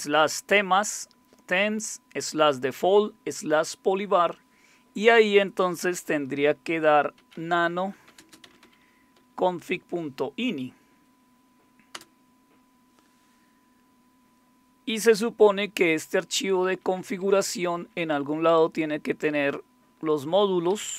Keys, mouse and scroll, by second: 6.9-9.6 typing, 9.8 Tab, 11.9 Return, 16.3 Down, 16.5 Down, 16.8 Down, 16.9 Down, 17.1 Down, 17.5 Down, 17.7 Down, 18.0-20.1 Down, 20.8 Down, 20.9 Down.